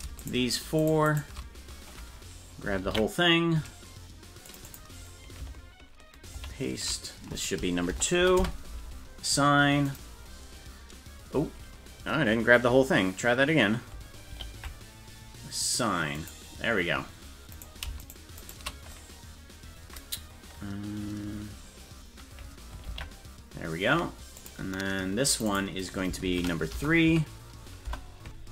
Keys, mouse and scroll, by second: 0.2 shift+right click, 0.8 shift+right click, 1.1 shift+right click, 2.8 ctrl+l, 4.5 click, 4.6-8.8 drag, 9.9 click, 14.3 ctrl+l, 16.2 click, 17.5 right click, 18.0 shift+right click, 22.9 ctrl+l, 24.4 click, 25.3 click, 25.5-28.5 drag.